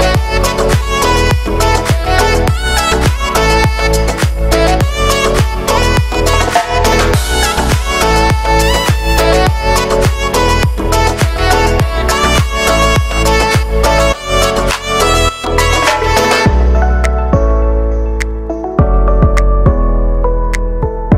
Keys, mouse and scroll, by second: 0.2 scroll up 1, 0.4-2.1 alt+right drag, 2.1 shift+middle click, 2.6-3.0 scroll up 3, 3.0-4.2 alt+right drag, 4.2-9.3 drag, 9.3-11.3 alt+right drag, 11.3 click, 11.6-13.5 drag, 13.5-15.2 alt+right drag, 15.2-16.3 drag, 16.3-16.7 scroll down 6, 16.7-18.3 middle drag, 18.3 click, 18.6 middle click, 19.5-20.3 scroll up 2, 20.3-21.1 scroll up 1.